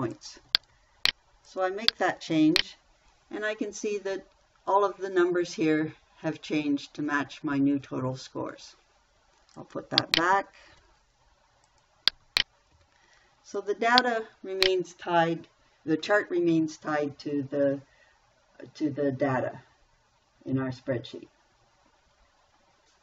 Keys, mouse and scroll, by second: 0.0-1.6 typing, 10.6 3, 11.1 0, 12.5 2, 13.1 0.